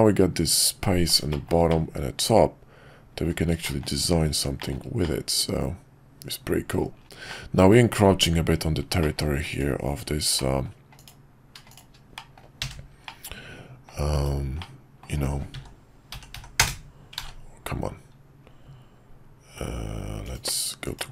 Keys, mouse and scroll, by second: 1.3 middle click, 1.7-3.2 middle drag, 3.6 shift+middle drag, 4.5 shift+middle drag, 5.0-6.8 middle drag, 7.3 middle click, 9.0 middle click, 9.9 Tab, 10.3 middle click, 12.1 middle click, 12.7 f, 13.0 middle click, 14.1 /, 14.6 middle click, 15.5 s, 17.1 ctrl+z, 20.2-21.1 drag.